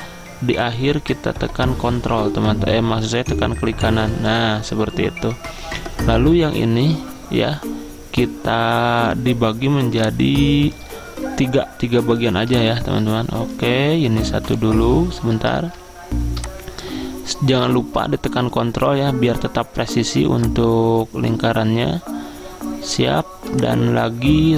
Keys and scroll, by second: 15.7 ctrl+z.